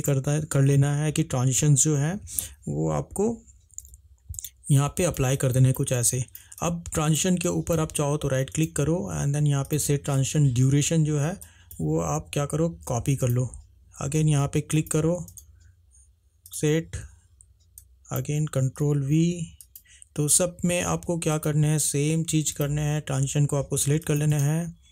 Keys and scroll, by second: 4.0 h, 12.9 ctrl+c, 18.9 ctrl+v.